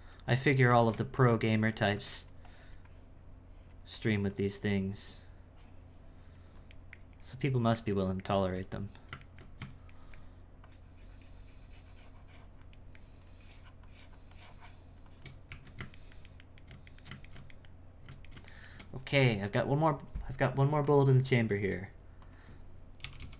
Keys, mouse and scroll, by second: 0.7 f, 1.2-6.8 shift+drag, 6.8-10.6 shift+middle drag, 10.6-12.8 shift+drag, 12.8 shift+middle click, 13.3-15.5 shift+drag, 15.5 z, 16.0-20.8 ctrl+middle drag, 20.8-23.3 drag.